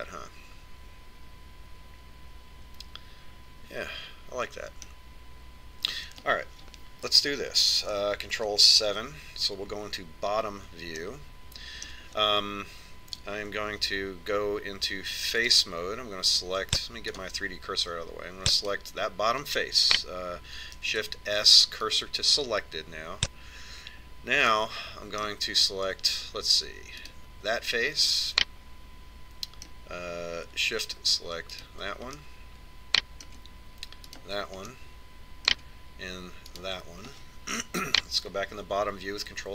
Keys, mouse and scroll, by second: 0.1 Tab, 0.7-2.7 middle drag, 9.5 ctrl+KP_7, 12.2 middle click, 13.0 middle click, 13.9 middle click, 15.0 ctrl+Tab, 18.3-20.1 drag, 20.1 right click, 22.1 shift+s, 25.8-27.6 middle drag, 28.3-29.6 right drag, 29.4 click, 29.6-31.3 middle drag, 32.9 right click, 33.5-34.5 drag, 34.5 middle click, 35.4-37.0 right drag, 36.0-37.8 middle drag, 37.8 right click.